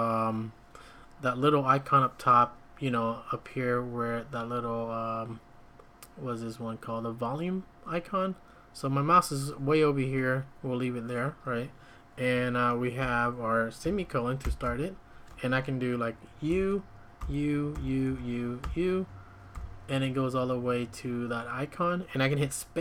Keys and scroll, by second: 13.0 Escape, 14.6 ctrl+;, 16.5-19.5 typing.